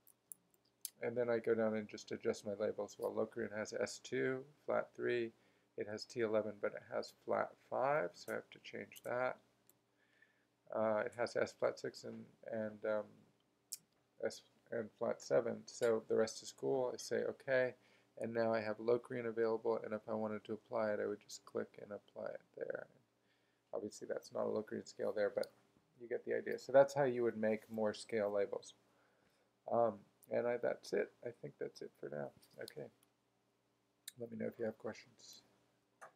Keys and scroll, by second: 0.0-1.0 typing, 9.7 shift+b, 14.0 BackSpace.